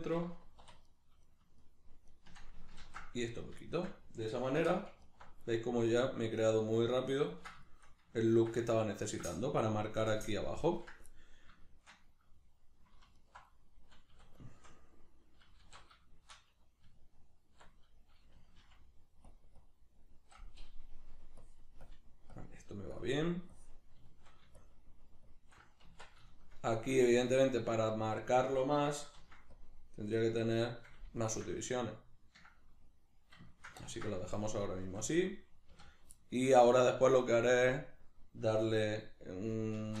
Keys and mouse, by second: 0.9 right click, 1.2 shift+right click, 1.6 shift+right click, 2.1 shift+right click, 2.8 ctrl+x, 3.7-5.0 shift+middle drag, 4.6 3, 5.0 alt+right click, 5.5-13.1 middle drag, 13.1 alt+right click, 13.5-19.3 middle drag, 14.1 a, 15.6 alt+q, 16.9 Tab, 19.3 click, 24.1 shift+middle click, 24.6-26.3 shift+drag, 25.9 Tab, 26.3-30.2 shift+middle drag, 29.1 ctrl+r, 30.2 right click, 31.2-40.0 shift+middle drag, 35.7 a, 39.8 shift+Tab.